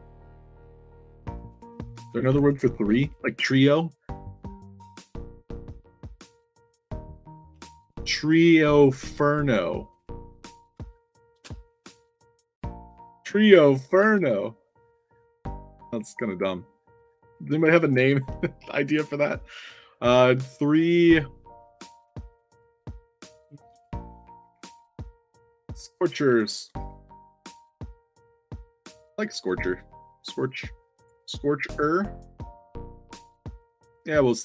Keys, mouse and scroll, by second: 1.3 click, 1.5 click, 2.1-3.0 typing, 7.5 click, 9.7 click, 9.9 click, 12.8-14.6 typing, 17.7 click, 19.8 click, 21.2 click, 23.3 click, 23.6 click, 24.1-27.2 typing, 28.4 click, 28.5 click, 29.2 ctrl+c, 30.9 click, 31.7 click, 33.0 click, 33.8 scroll up 2.